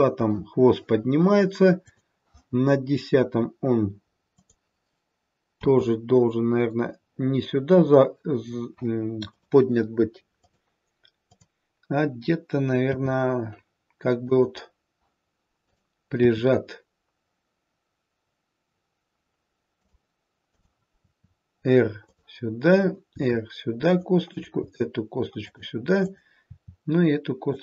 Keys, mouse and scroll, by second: 1.9 click, 4.2 click, 5.5 r, 10.4 click, 11.3 click, 12.9 r, 15.6 click, 16.1 r, 20.5 click, 21.0 r, 22.6 click, 23.1 r, 24.1 click, 24.6 r, 25.9 click, 26.3 r.